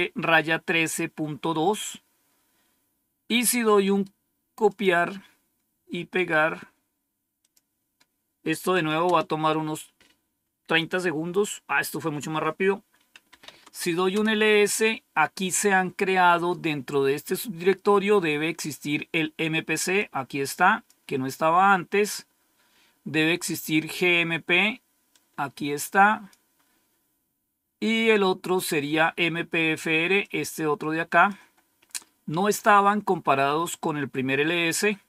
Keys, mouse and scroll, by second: 3.7 right click, 4.6 click, 6.1 right click, 7.3 click, 9.0 Return, 13.0-13.9 typing, 14.0 Return, 16.2 typing, 19.9 click, 25.0-26.4 drag, 30.2-31.5 drag, 31.8-33.3 scroll up 2, 34.6-35.0 scroll down 2.